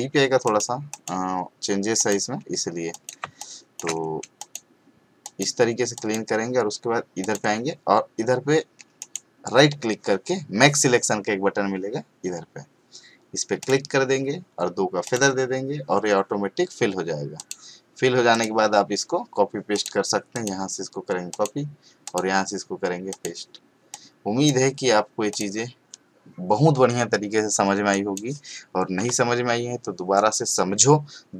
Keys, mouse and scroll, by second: 0.4 click, 3.2 space, 3.4 click, 3.7-4.0 space, 4.4 click, 9.0 right click, 13.6 click, 17.3 click, 27.9 click.